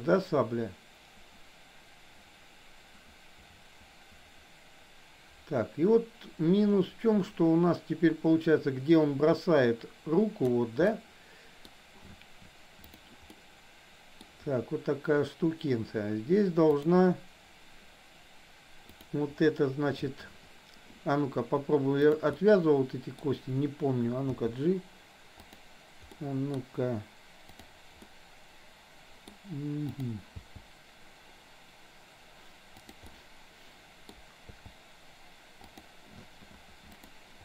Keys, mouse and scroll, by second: 10.8 middle click, 12.8 click, 13.3-14.2 middle drag, 16.7 click, 19.0 click, 22.1 click, 22.3-23.2 middle drag, 24.5 g, 26.2-26.6 middle drag, 27.6 click, 28.0-29.3 middle drag, 29.8 click, 30.3 g, 33.1-34.2 middle drag, 34.6 g, 37.0 click.